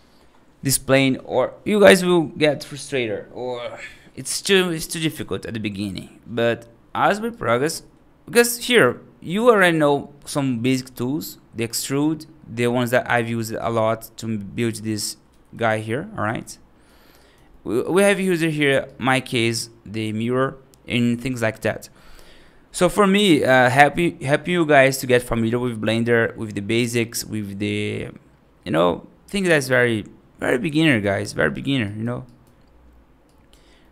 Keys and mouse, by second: 7.3 right click, 7.7 middle drag, 8.2 middle click, 8.6 right drag, 9.5 right drag, 10.1-10.4 middle drag, 11.4 middle drag, 11.7 right drag, 12.8 right drag, 12.9 right click, 13.4 click, 13.8 middle drag, 14.6 F3, 15.2 F2, 15.5 click, 16.2 g, 17.1-17.5 right drag, 17.5 middle drag, 17.9 right drag, 18.8 right drag, 19.8 right drag, 20.2-20.6 middle drag, 30.7 right drag, 31.1 middle drag, 31.7 right drag, 32.1 right drag, 33.1-33.8 right drag, 33.8-33.9 middle drag.